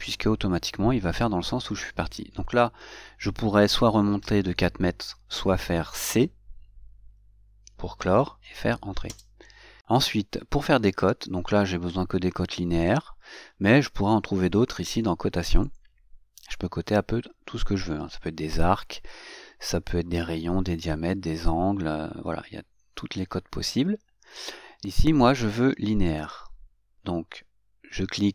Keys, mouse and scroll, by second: 8.2 c, 16.1 click, 19.8-21.1 drag.